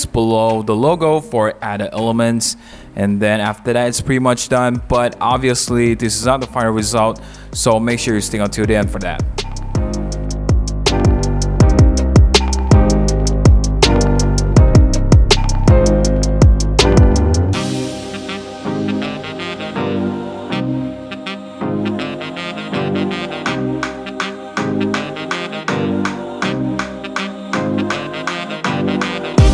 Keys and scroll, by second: 1.6 super+t, 4.9 Return, 9.2 super+-, 9.3 super+z, 10.2 super+t, 10.6 Return, 10.8 Return, 10.8 super+a, 10.9 super+d, 11.1 super+0, 11.2 super+-, 11.5 1, 12.7 super+t, 13.2 Return, 13.3 super+-, 13.5 super+a, 13.8 super+z, 14.0 super+d, 14.3 super+t, 15.0 Return, 15.1 super+0, 16.3 super+-, 16.4 super+0, 17.6-21.4 typing, 18.8 super+a, 19.0 super+d, 19.0 super+t, 19.3 Return, 21.4 Return, 21.9 super+=, 22.9 Return, 22.9-27.3 typing, 23.2 Return, 25.5 super+a, 25.7 super+d, 26.0 super+-, 27.5 super+t, 27.8 Return, 28.8 super+a, 28.9 super+d, 28.9 super+1, 29.2 super+-.